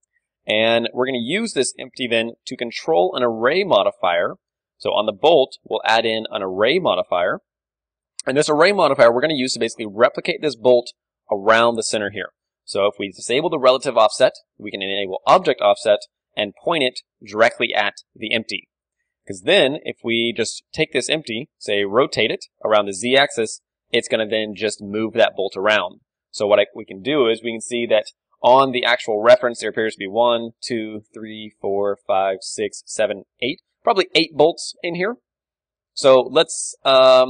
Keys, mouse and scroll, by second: 2.8-6.1 right drag, 7.3-8.5 drag, 8.5-11.0 middle drag, 9.5 z, 13.8-15.8 drag, 18.2-21.0 middle drag, 18.4 z, 21.0-25.5 right drag, 22.1 r, 26.0-28.1 right drag, 26.0 z, 28.7 KP_1, 29.1-31.9 middle drag, 33.9-37.2 middle drag, 36.3 z.